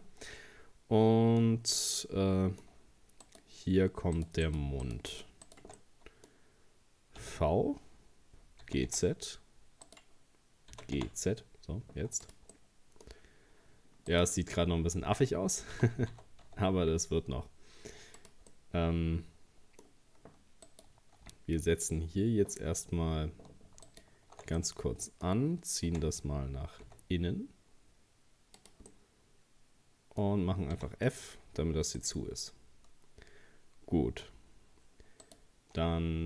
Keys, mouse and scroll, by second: 3.2 right click, 4.2 shift+right click, 4.5 shift+right click, 4.8 shift+right click, 5.1 shift+right click, 5.5 shift+right click, 5.8-7.2 middle drag, 7.2 v, 10.7 g, 12.5 middle click, 13.2 scroll up 1, 14.1 right click, 15.7 g, 18.5-20.7 middle drag, 20.7 right click, 23.9 alt+shift+right click, 24.6-25.9 middle drag, 25.9 e, 28.9-30.7 middle drag, 30.7 f, 31.3-31.6 scroll down 2, 32.0-34.3 middle drag, 34.3-34.8 scroll up 1, 35.2 right click.